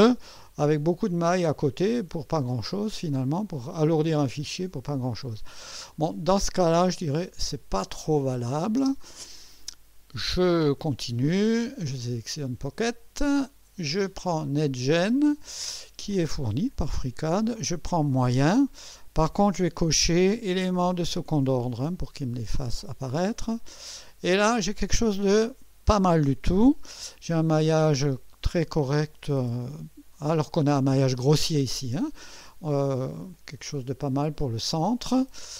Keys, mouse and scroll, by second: 2.3-4.1 drag, 4.4-5.7 drag, 5.9 click, 8.3 click, 8.8 space, 10.9 click, 13.2 click, 14.9 click, 20.5 click, 23.4 click, 24.7-25.7 drag, 27.5 scroll up 1, 28.5-30.5 drag, 31.5-32.3 drag, 33.3 click.